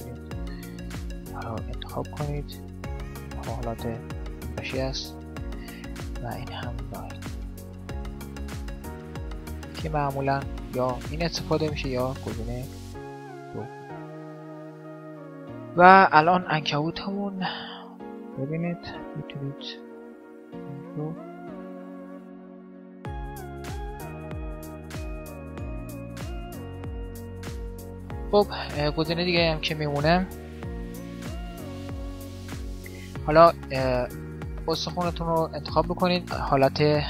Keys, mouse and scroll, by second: 0.8-2.5 drag, 1.7-4.7 right drag, 5.9-7.9 drag, 7.9-9.8 middle drag, 9.6 right click, 12.6-14.3 drag, 14.3-17.5 middle drag, 17.5-19.6 drag, 17.5 right click, 19.6 g, 19.7-20.9 middle drag, 21.7-22.9 middle drag, 22.9 click, 22.9 right click, 23.0 middle click, 23.6 g, 23.8 right click, 24.0 g, 24.6-25.8 middle drag, 25.0 click, 25.2 right click, 25.7 r, 26.0 right click, 26.2 r, 26.8 r, 27.0-28.2 middle drag, 28.6-30.2 middle drag, 30.2 a, 30.4 a, 31.3 alt+r, 31.5 alt+g, 32.3 middle click, 33.2 click, 34.0 right click, 34.8 Tab, 36.0-37.0 right drag, 36.6 Tab.